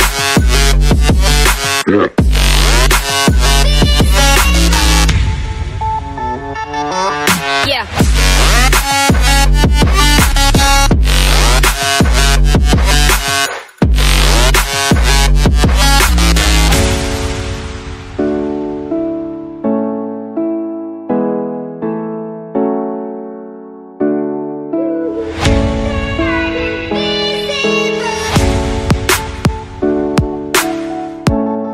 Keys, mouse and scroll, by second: 1.0 click, 2.8 click, 4.1 click, 5.0 click, 5.9 click, 6.4 click, 6.8 right click, 8.5 click, 9.9 click, 10.5 click, 11.4 ctrl+z, 12.4 click, 13.1 click, 14.1 click, 15.2 click, 15.7 click, 15.9 middle click, 16.7 middle click, 17.5 click, 19.8 click, 20.6 click, 20.9 middle click, 21.0 middle click, 22.6 click, 23.0 click, 23.6 click, 24.3 click, 26.8 click, 28.0 Return, 29.9-31.7 typing.